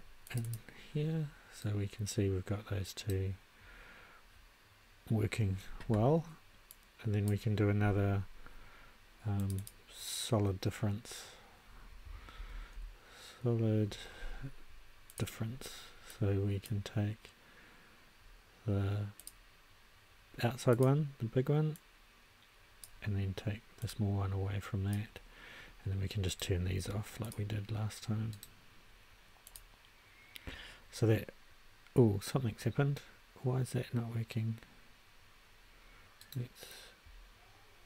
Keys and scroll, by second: 12.1-13.2 typing.